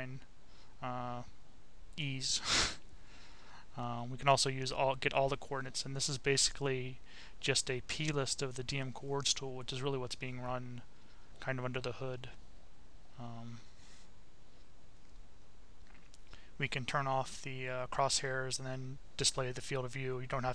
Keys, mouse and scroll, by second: 2.3 click, 3.8 click, 5.2 click, 7.9-10.0 drag, 14.2 click, 16.6 click, 17.6 click, 20.3 click.